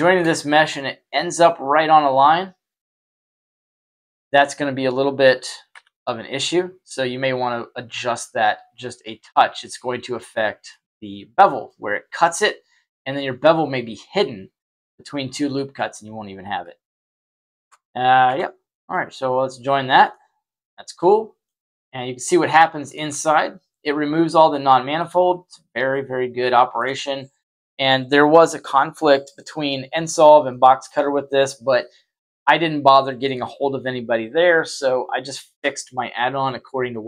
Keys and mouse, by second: 3.5 g, 10.6-11.6 middle drag, 17.0 z, 17.5 Tab, 18.2 Tab, 18.6 middle click, 20.0-21.4 middle drag, 22.2-22.9 shift+middle drag, 24.9 middle click, 25.2-25.8 middle drag, 26.4 shift+middle drag, 30.5 shift+middle click, 36.8 middle click.